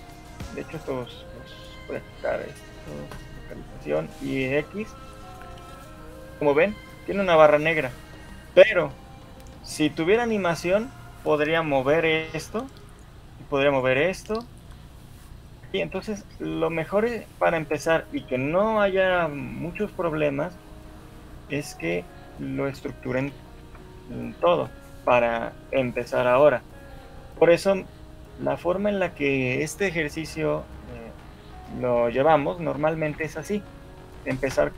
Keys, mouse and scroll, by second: 0.5 click, 1.1 shift+click, 1.7 click, 12.0 click, 12.6 g, 13.8 click, 13.8 g, 14.6 g, 17.3 shift+click, 21.8 ctrl+z, 22.2 ctrl+z, 22.4 ctrl+z, 23.8 ctrl+z, 25.2 ctrl+z, 32.2 shift+middle click, 32.2 scroll up 1.